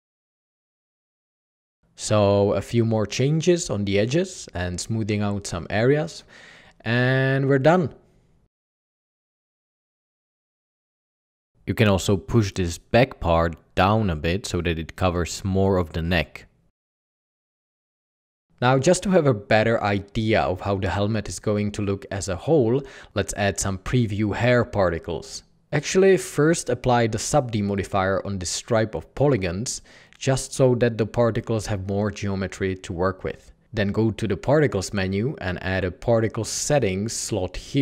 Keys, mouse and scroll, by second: 6.7-7.8 typing, 6.8 Tab, 9.6-14.2 typing, 10.0 alt+a, 11.5 Escape, 13.2 Escape, 15.1 Tab, 15.7 typing, 30.1 Tab, 32.8 Tab.